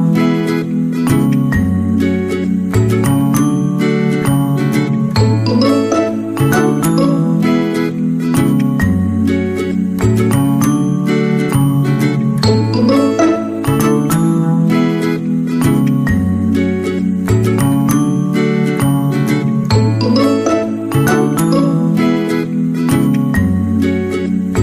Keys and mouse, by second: 0.4 Tab, 1.1 right click, 1.3 alt+z, 1.5 c, 2.4 g, 5.7 right click, 5.9 c, 6.6 g, 7.6 alt+z, 8.0 Tab, 8.9 middle click, 9.8 middle click, 10.6-12.6 drag, 13.2-13.7 shift+middle drag, 15.7 w, 16.6 KP_3, 17.2-17.5 shift+middle drag, 18.2 Tab, 18.7 right click, 19.0 g, 20.5 g, 22.3 right click, 23.1 shift+middle click, 24.1 shift+middle click, 24.5 alt+z.